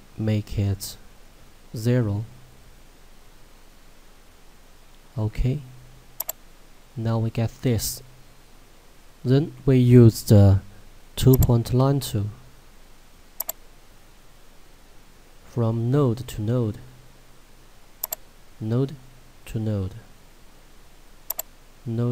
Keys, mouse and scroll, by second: 6.2 click, 7.1 scroll up 1, 11.6 click.